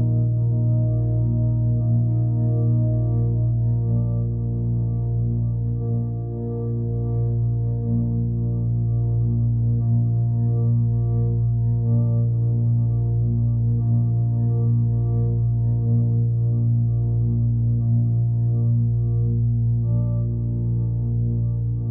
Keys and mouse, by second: 2.5 click, 3.8 click, 5.1 click, 5.3 click, 6.2 click, 6.9 click, 7.2 BackSpace, 7.6 BackSpace, 8.6-9.6 drag, 10.4-19.8 drag, 20.4-21.9 drag.